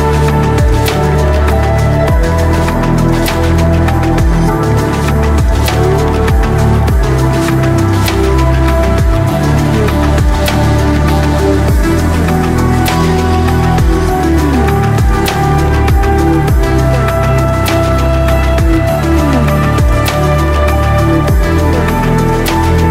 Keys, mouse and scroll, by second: 0.9 ctrl+click, 1.2 ctrl+click, 1.6 shift+click, 2.0 shift+middle click, 2.3 ctrl+shift+middle click, 2.7 shift+middle click, 3.1 shift+middle click, 3.6 shift+middle click, 3.6 shift+click, 3.7 shift+middle click, 3.9 shift+click, 4.3 shift+click, 5.2 shift+middle click, 5.4 shift+middle click, 5.6 shift+click, 5.9 middle click, 6.0 shift+click, 6.5 ctrl+middle click, 6.7 ctrl+middle click, 6.7 ctrl+click, 6.9 middle click, 7.3 shift+click, 7.5 shift+middle click, 8.0 shift+click, 8.2 shift+click, 8.4 shift+click, 8.9 shift+click, 9.2 shift+click, 9.5 shift+click, 9.7 middle click, 9.9 shift+click, 10.1 middle click, 10.3 shift+middle click, 10.4 shift+click, 10.8 shift+middle click, 11.0 shift+middle click, 11.4 shift+middle click, 11.6 shift+middle click, 12.1 middle click, 12.3 shift+click, 12.6 shift+middle click, 13.2 middle click, 13.3 shift+middle click, 13.6 shift+click, 14.0 ctrl+shift+click, 14.5 shift+middle click, 14.8 shift+click, 15.1 middle click, 15.3 shift+click, 15.4 shift+middle click, 15.9 ctrl+shift+click, 16.3 ctrl+click, 17.2 ctrl+click, 17.5 shift+click, 17.7 middle click, 17.9 KP_7, 18.3 middle click, 18.5 shift+click, 19.0 ctrl+middle click, 19.3 shift+click, 19.6 shift+click, 19.7 middle click, 19.9 shift+click, 20.1-21.4 drag.